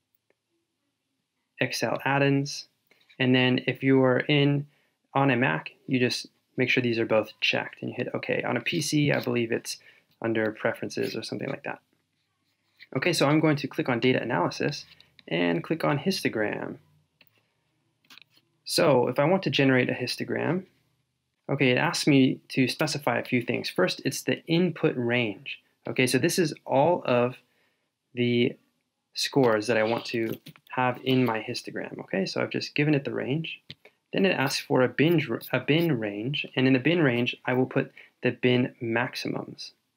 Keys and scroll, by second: 30.4 shift+super+Down.